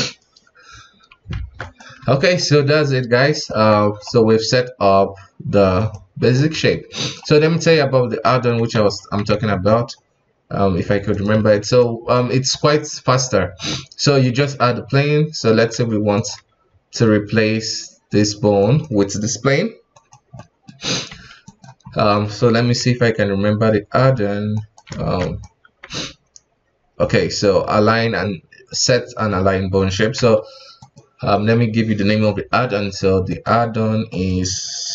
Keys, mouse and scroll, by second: 1.3 ctrl+Tab, 1.6 right click, 2.0 x, 3.3 right click, 3.5 ctrl+Tab, 3.8 right click, 4.1 g, 6.3 right click, 6.5 g, 7.4-7.7 scroll down 3, 7.7-8.1 middle drag, 8.1 scroll up 2, 8.3 ctrl+Tab, 8.7 KP_1, 9.3 alt+a, 9.8-11.1 scroll down 2, 11.1 click, 11.5 shift+a, 13.5 s, 14.7 g, 15.7 s, 16.4 g, 18.6 right click, 19.9 right click, 20.3 middle click, 21.1 s, 22.6 F4, 24.5 shift+right click, 24.9 ctrl+Tab, 25.2 right click, 25.8 q, 30.1 F4.